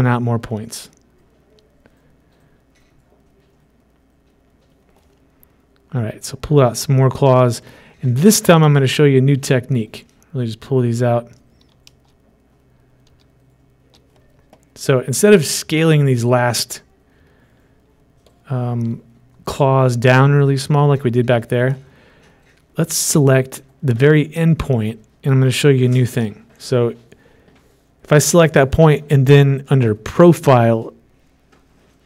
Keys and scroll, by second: 13.6 ctrl+shift+z.